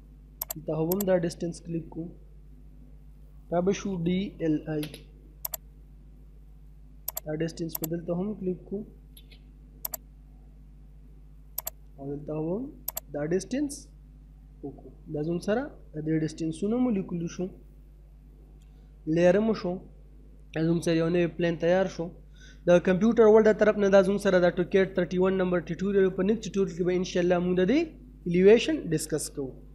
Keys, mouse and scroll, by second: 1.3 scroll down 1, 1.5 middle click, 1.9 scroll down 1, 2.2 middle click, 3.4 d, 4.3 space, 4.6 scroll up 1, 5.4 click, 5.8 scroll down 1, 5.9 middle click, 7.1 click, 8.2 scroll down 1, 8.4 middle click, 8.7 space, 9.0-9.9 scroll up 1, 9.9 click, 10.3 middle click, 11.6 click, 13.5 scroll down 1, 14.1 middle click, 14.7-15.0 scroll down 1, 15.0 middle click, 26.7 middle click.